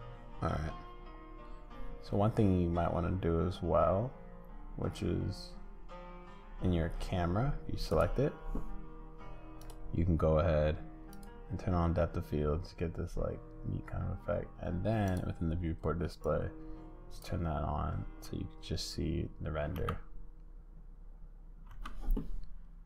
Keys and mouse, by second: 7.9-17.2 drag, 19.7 space, 21.7 space.